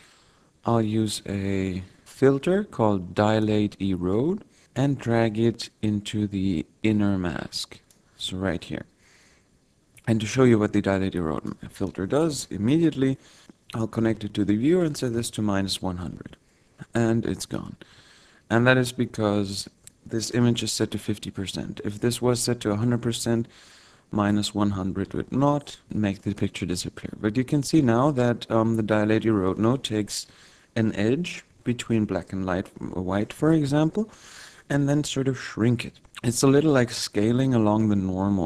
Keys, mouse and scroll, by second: 4.4 click, 9.2-10.7 scroll up 4, 10.7 click, 13.4 click, 16.7 click, 24.3 click, 26.7 middle click.